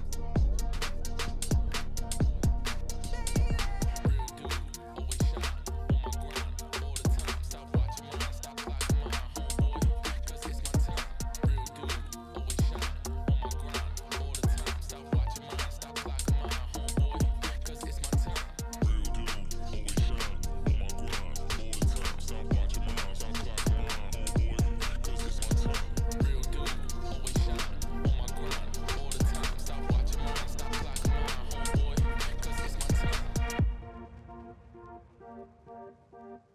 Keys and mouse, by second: 0.0-1.2 drag, 1.6 ctrl+s, 3.5 middle click, 4.1 middle click, 4.5 middle drag, 4.8 middle click, 5.2 middle click, 6.2 click, 8.4-11.4 shift+drag, 12.1 middle click, 12.6 middle click, 13.3 middle click, 15.0 ctrl+s, 17.4 click, 25.8 ctrl+s, 28.2 click, 30.0-36.5 drag.